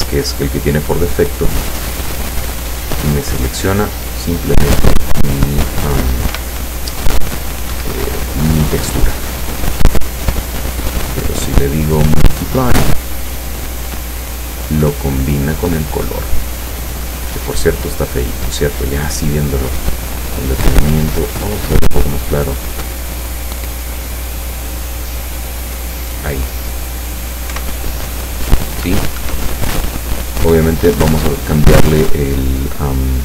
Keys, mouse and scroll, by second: 1.5-2.5 scroll up 3, 4.5-5.3 scroll down 2, 6.3 p, 7.7 Escape, 9.1-10.7 scroll down 8, 11.3 click, 12.8 click, 17.3 click, 18.3 click, 19.7-26.1 drag, 27.6 p, 29.2 Escape.